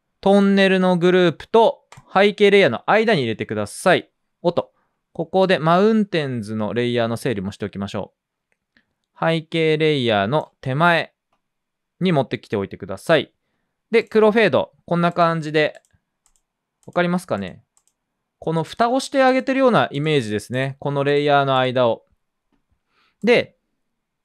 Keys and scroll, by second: 3.9-4.7 typing.